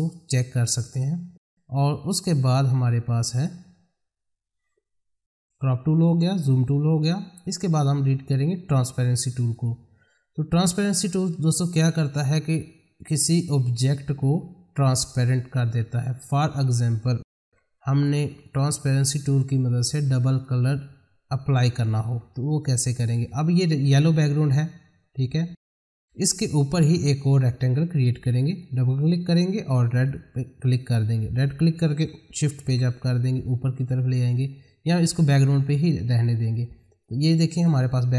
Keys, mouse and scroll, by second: 3.3 click, 9.5 click, 16.2-20.3 drag, 23.0 click, 28.3 click, 32.6 shift+Page_Up, 34.9 ctrl+z, 36.5 click.